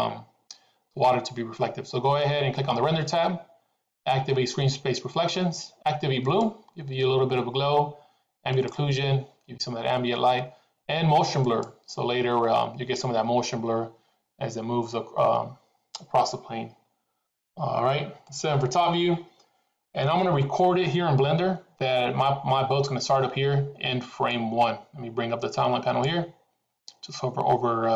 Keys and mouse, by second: 6.4 click, 10.2 click, 12.1 click, 18.3 KP_7, 24.2-27.9 drag.